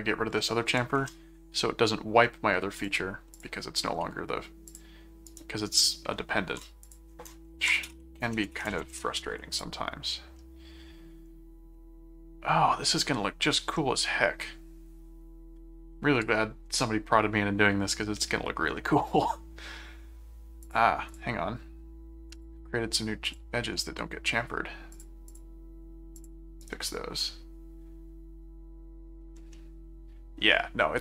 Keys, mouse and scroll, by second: 1.0 Return, 2.7 click, 3.3 click, 4.7 click, 5.4 right click, 6.8 click, 7.8 BackSpace, 7.9 a, 8.5 shift+BackSpace, 8.7 shift+a, 8.9 shift+Return, 9.5 click, 10.3-16.2 middle drag, 18.7-19.7 middle drag, 20.6 click, 22.4 click, 23.2 click, 23.8 middle click, 24.9 click, 26.1 click, 26.6 right click, 29.5 middle click.